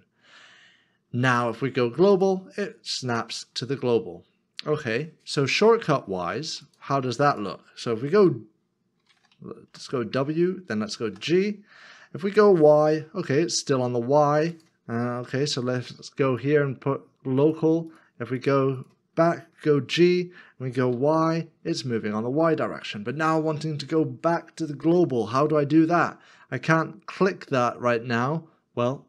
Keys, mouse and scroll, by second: 5.6 middle click, 9.7 w, 12.8 g, 15.1 ctrl+z, 20.9 y.